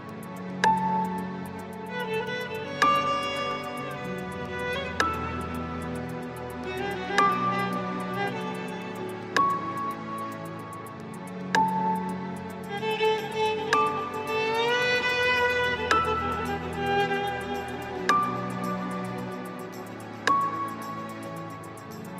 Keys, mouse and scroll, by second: 1.9-5.0 middle drag, 5.1 click, 6.8 shift+click, 8.1 ctrl+shift+KP_Add, 8.4-9.4 ctrl+shift+KP_Add, 9.6 ctrl+shift+KP_Add, 9.9 ctrl+shift+KP_Add, 12.0 click, 15.0-18.2 middle drag, 20.3 click.